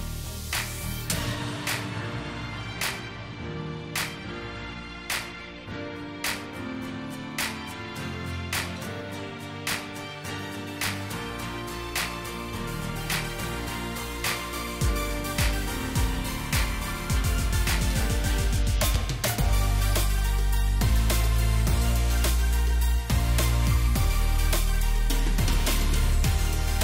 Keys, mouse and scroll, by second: 7.6 right click, 8.6 double click, 9.6 shift+click, 10.0 shift+right click, 12.6-13.4 alt+scroll down 1, 14.2 space, 15.1 alt+scroll down 2, 15.8-16.1 alt+scroll up 1, 19.1 alt+scroll up 2, 20.4 right click, 21.9 double click, 23.7 alt+click, 25.7 shift+click.